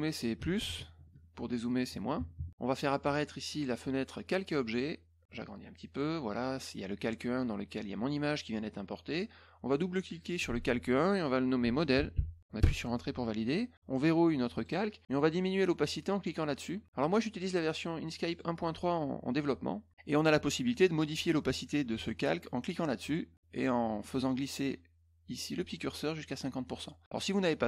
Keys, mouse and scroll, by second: 3.5 click, 4.6 click, 5.4 click, 10.2 click, 10.3 click, 11.7-12.6 typing, 14.5 click, 17.4 click, 18.3 click, 23.0 click, 23.6-27.2 drag.